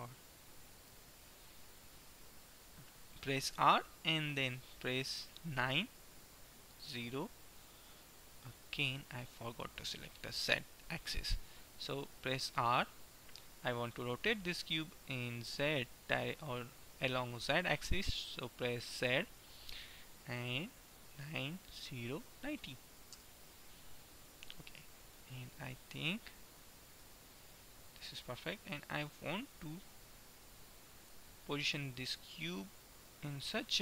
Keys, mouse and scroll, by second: 0.2-3.4 middle drag, 3.4 r, 12.6 r, 25.4 middle click, 28.2-30.1 drag, 33.1 click.